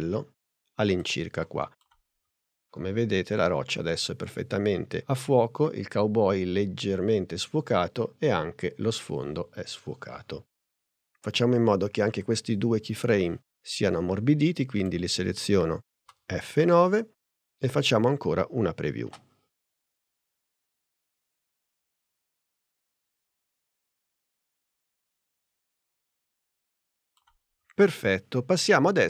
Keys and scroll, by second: 16.1 F9.